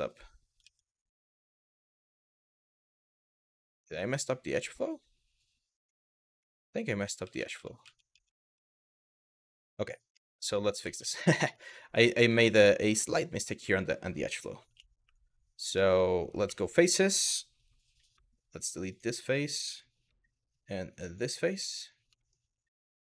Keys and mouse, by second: 3.1-5.6 middle drag, 6.0 middle click, 6.7 ctrl+z, 6.8 ctrl+z, 7.0 ctrl+z, 9.0 middle click, 9.7 KP_1, 10.5 ctrl+z, 10.7 ctrl+z, 12.1 shift+middle click, 12.8 middle click, 14.3 1, 14.7 w, 16.1 3, 17.8 Delete, 19.7 Delete, 21.3 middle click, 21.9 middle click.